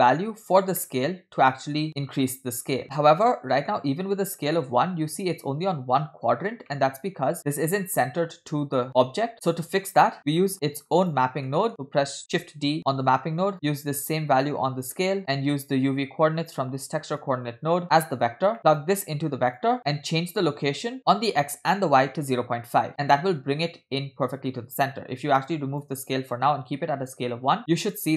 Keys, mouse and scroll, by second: 0.1 click, 0.9-1.2 middle drag, 3.6 middle click, 4.0 scroll up 2, 6.7 middle click, 10.2 middle click, 10.2 scroll down 2, 11.1 click, 11.5 middle click, 12.3 shift+s, 12.9 shift+d, 13.5 middle click, 14.1-15.2 drag, 15.2-15.6 middle drag, 17.3-18.2 drag, 18.6 middle click, 18.6 scroll up 2, 18.9-19.8 drag, 20.9 shift+click, 25.5-26.1 drag, 27.6 shift+click.